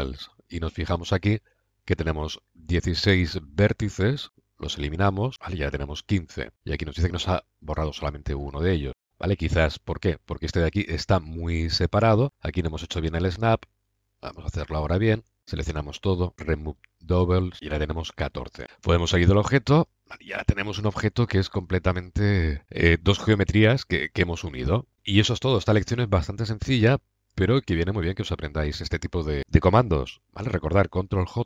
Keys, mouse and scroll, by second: 4.2-5.3 drag, 8.2 click, 8.8 middle click, 8.9 click, 9.1 middle click, 9.9-11.0 middle drag, 11.9 middle click, 12.2 click, 15.4 a, 15.8 a, 16.3-17.5 drag, 18.0-19.1 drag, 18.6 a, 18.7 Tab, 19.1-19.7 middle drag, 22.5-24.9 middle drag, 26.4-26.7 middle drag, 27.8-28.7 middle drag, 29.1 middle drag, 29.3 middle drag, 31.0-31.4 middle drag.